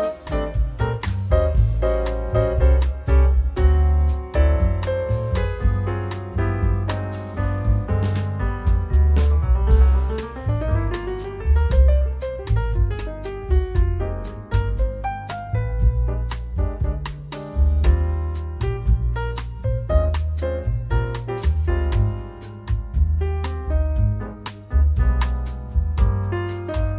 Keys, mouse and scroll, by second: 1.0 click, 1.4 click, 2.0-2.8 scroll down 2, 3.0-5.1 drag, 5.4-5.8 scroll up 1, 6.2 scroll down 1, 6.5-9.1 drag, 11.4 click, 13.0 ctrl+click, 14.5 click, 16.3-19.3 drag, 20.0 click, 21.6 click, 23.3 click, 24.6 click, 26.6 Right.